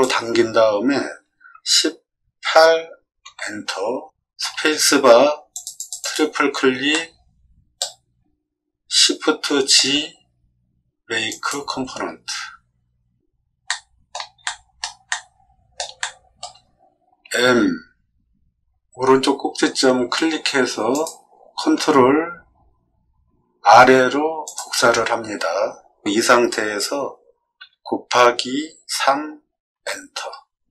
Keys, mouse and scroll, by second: 1.5 1, 2.5 8, 3.2 Return, 4.4 space, 5.5 click, 5.8 click, 6.0 click, 6.9 middle click, 9.5 shift+g, 11.2 click, 13.6 shift+middle click, 14.4 middle click, 15.1 middle click, 16.0 shift+middle click, 17.2 m, 20.9 click, 24.4 click, 27.5 x, 28.9 3, 29.7 Return.